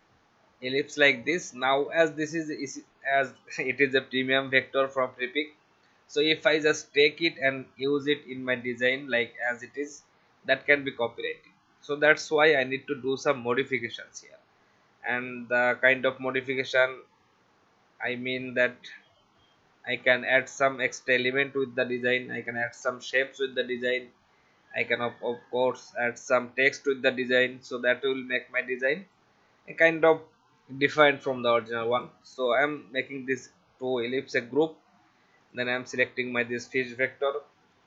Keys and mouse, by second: 1.3 click, 4.5 click, 5.4 shift+Up, 8.6 shift+click, 9.8 click, 11.8 click, 14.1 click, 19.8 ctrl+alt+f, 20.8 click, 23.5 click, 27.6 v, 28.0 click, 30.6 ctrl+g, 31.9 click, 34.3 click, 35.4 click, 37.5 ctrl+alt+f.